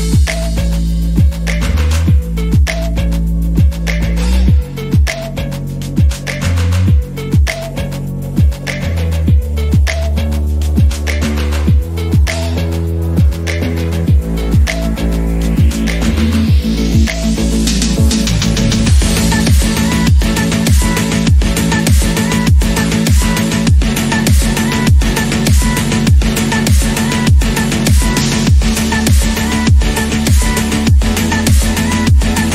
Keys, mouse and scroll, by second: 0.4-1.7 scroll up 9, 0.8 shift+middle click, 1.7 click, 3.9-4.6 scroll up 1, 4.6 e, 6.5 e, 8.1-8.6 scroll down 10, 8.6 Tab, 8.7 click, 9.1 shift+middle drag, 9.4-9.8 scroll up 5, 9.8 click, 10.0 Tab, 10.2 scroll up 4, 10.5-11.2 scroll down 12, 11.5 click, 12.6-13.4 scroll up 11, 12.9 shift+middle click, 13.4 shift+middle click, 13.9 click, 14.9 scroll up 3, 15.1-19.0 shift+middle drag, 19.0-19.9 scroll down 6, 19.9-20.6 scroll up 5, 20.7 ctrl+z, 22.2-22.7 scroll down 5, 22.7 middle click, 23.1-23.4 scroll up 4, 23.5-24.6 middle drag, 24.6 KP_7, 25.4 KP_1, 25.8 scroll up 3, 26.2 shift+middle click, 26.9-28.3 scroll down 2, 28.3 e, 30.8 ctrl+z, 31.4 click.